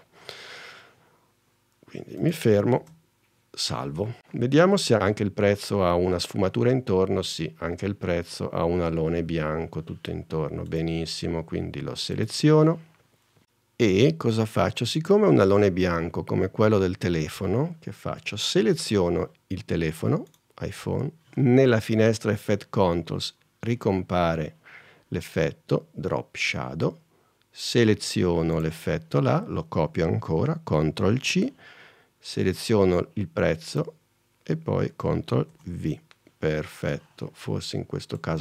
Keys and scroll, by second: 2.9 super+s, 4.9 super+Tab, 31.3 super+c, 35.7 super+v.